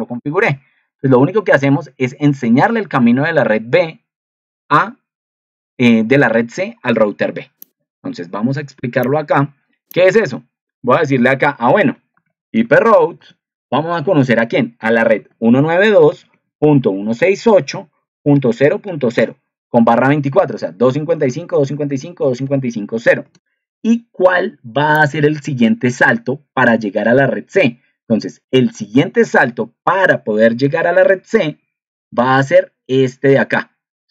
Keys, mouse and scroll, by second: 31.4 ctrl+2.